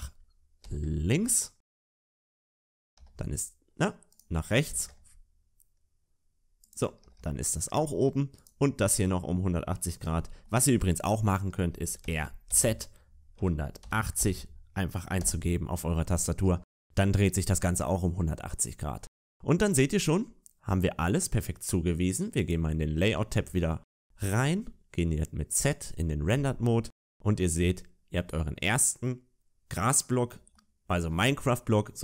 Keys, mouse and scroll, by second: 2.7 a, 2.9 a, 4.0 right click, 4.4 r, 6.9 a, 7.1 a, 7.4 middle click, 8.3 right click, 12.0 shift+middle click, 12.0 r, 16.2 a, 16.3 a, 17.2 middle click, 18.3 middle click, 22.3 click, 25.7 z, 26.3 shift+middle click, 27.0 scroll up 2, 27.5 middle click, 30.4 shift+middle click, 31.7 middle click.